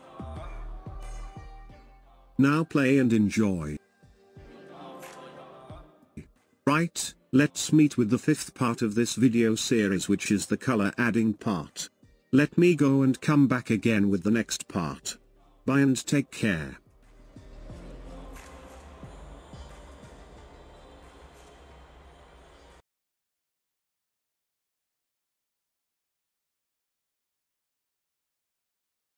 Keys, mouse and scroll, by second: 0.3 click, 1.2 click, 1.7 click, 7.9 space, 10.7-13.2 drag, 13.2 ctrl+s.